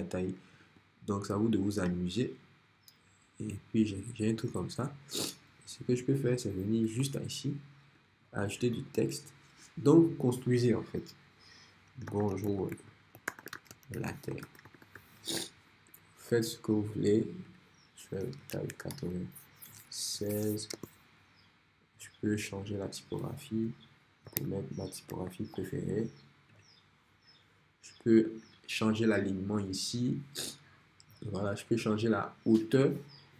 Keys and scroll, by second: 7.0 t, 11.8-15.5 typing, 18.6 shift+9, 20.0 shift+6, 20.8 Return, 24.0-25.1 typing.